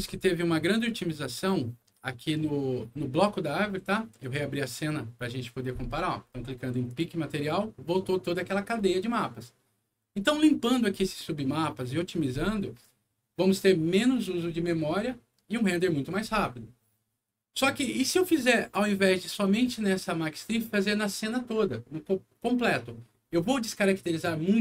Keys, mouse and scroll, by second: 1.3-2.5 middle drag, 4.2 click, 6.8 click, 10.0 scroll up 1, 11.7 middle click.